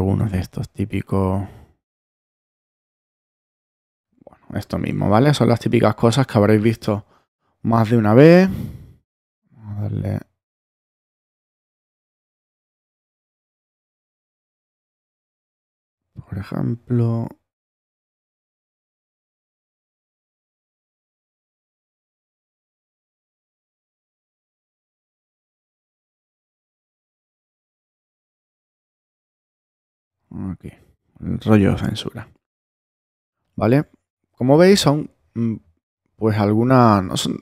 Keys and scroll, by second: 8.3 super+z.